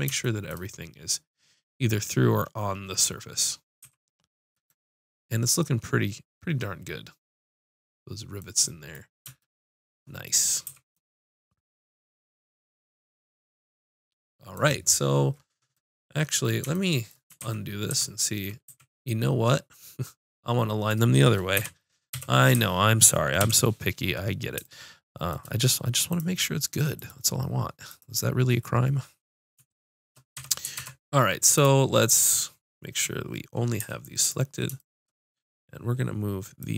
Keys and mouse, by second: 3.8 z, 10.7 a, 17.4 ctrl+z, 17.9 ctrl+z, 18.7 a, 21.6 KP_7, 22.1 KP_5, 22.6 z, 23.4 KP_5, 26.1-27.7 drag, 28.5-29.7 drag, 30.4 Tab, 33.9 b, 36.6-36.7 drag.